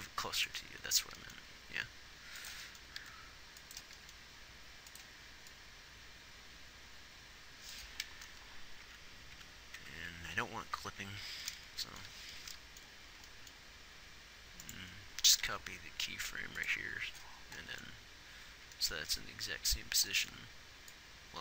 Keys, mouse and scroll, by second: 0.1 g, 1.5 g, 3.4 r, 9.2 Left, 9.8 Left, 10.2 Right, 10.6 Right, 11.2 Right, 15.8 shift+d.